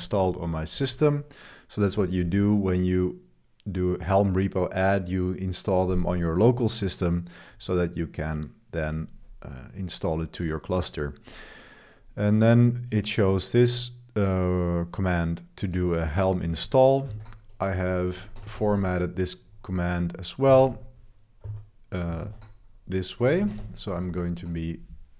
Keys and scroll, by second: 0.1 super+1, 0.4 super+3, 0.4 super+1, 17.1 super+3, 17.3 super+3, 18.3 ctrl+b, 19.2-21.4 typing, 22.2 super+3, 23.4 ctrl+b, 24.1 super+v.